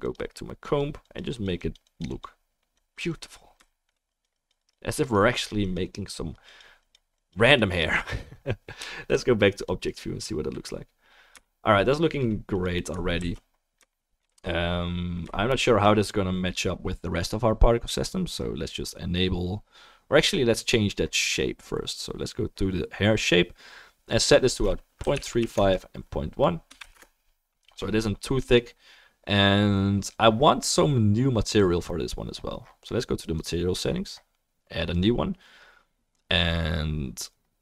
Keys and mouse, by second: 6.8-12.8 middle drag, 6.8-37.6 right drag, 13.2 ctrl+s, 20.2 click, 24.1-33.5 drag, 24.1-33.5 middle drag, 35.6-37.6 drag, 35.6-37.6 middle drag.